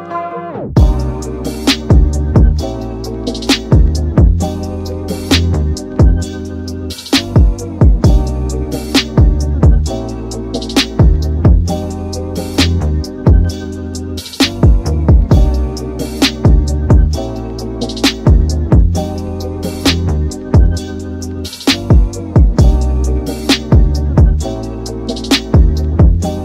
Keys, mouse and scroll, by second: 3.3 s, 5.3 g, 6.1 Tab, 7.6 ctrl+a, 7.9 Tab, 8.6 ctrl+r, 12.2-14.6 middle drag, 14.9 click, 16.2 click, 16.8 g, 21.7 click, 24.6 click, 25.1 g.